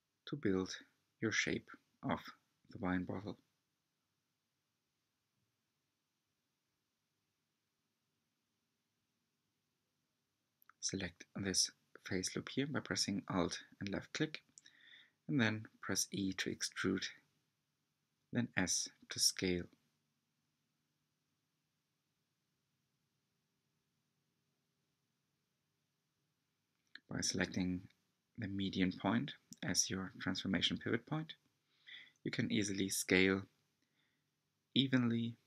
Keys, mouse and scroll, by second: 2.6 r, 6.0 3, 6.9 alt+click, 8.9 alt+click, 11.6 s, 14.9 e, 21.3 s, 24.2 s, 26.0-29.1 drag, 29.5 s.